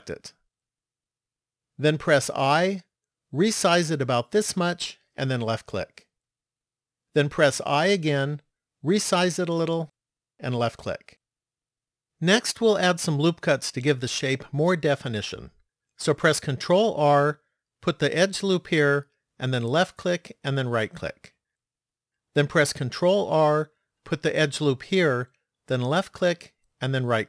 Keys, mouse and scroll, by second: 2.3 i, 7.8 i, 17.4 ctrl+r, 23.1 ctrl+r.